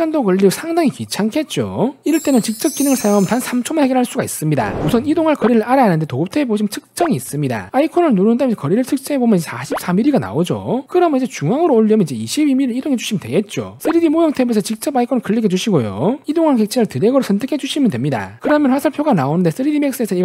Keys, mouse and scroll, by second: 1.7 click, 5.4 click, 6.7 click, 8.2 shift+middle click, 8.9 scroll up 2, 9.7 click, 15.0 click, 16.1 click, 16.7 scroll up 2, 17.3 middle click, 17.8 click.